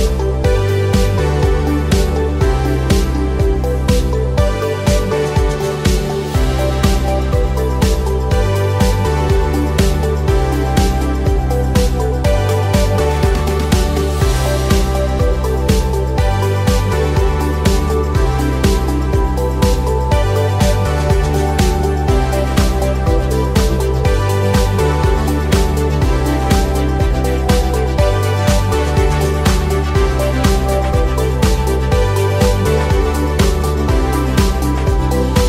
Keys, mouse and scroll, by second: 0.0 click, 0.6 shift+click, 0.8 shift+click, 1.1 shift+click, 2.3 i, 4.0 click, 4.8 KP_1, 7.8 s, 10.1 click, 10.8 click, 13.4 e, 15.3 click, 15.7 s, 16.1 z, 16.6 0, 17.0 Return, 18.0-20.3 drag, 20.7 scroll down 1, 21.2-23.0 middle drag, 25.2 click, 26.8 g, 28.2 click, 29.2 click, 29.7 g, 31.8 click, 32.9 2, 33.2 click, 33.8 click, 34.8 click.